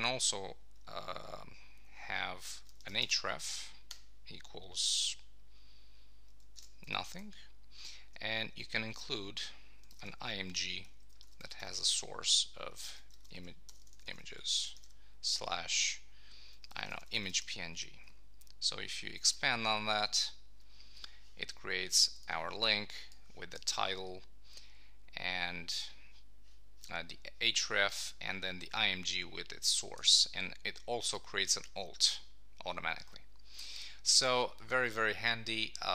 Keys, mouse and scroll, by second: 6.6 shift+#, 7.1 Right, 9.6 shift+., 11.0 Left, 18.0 Right.